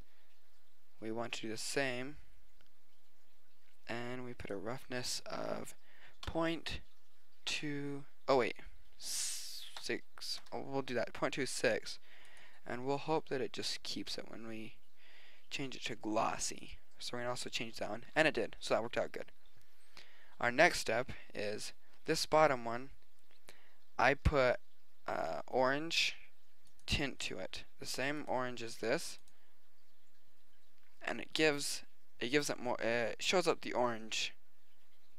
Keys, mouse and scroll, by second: 1.7 click, 2.9-3.5 drag, 4.5-6.4 drag, 8.3 click, 12.3-13.9 drag, 22.1-23.9 drag, 26.7-28.5 drag, 28.6 middle click, 28.9 click.